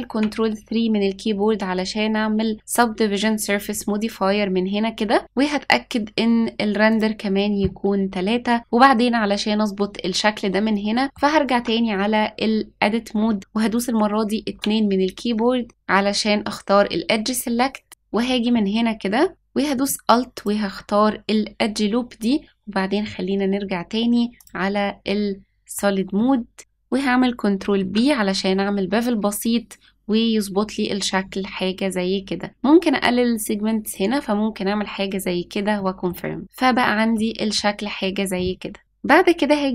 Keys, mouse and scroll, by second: 0.1 ctrl+3, 2.7 click, 6.8 click, 10.7 scroll up 2, 11.0 shift+middle click, 11.5 Tab, 12.3-14.5 scroll up 1, 14.5 2, 17.9 click, 18.5 middle click, 20.3 alt+click, 24.3 click, 26.1 middle click, 27.7 ctrl+b, 35.7 middle click, 36.4-37.1 scroll down 1, 37.1 middle click, 37.1-37.5 scroll down 2, 37.8-38.8 scroll up 1, 38.8 middle click.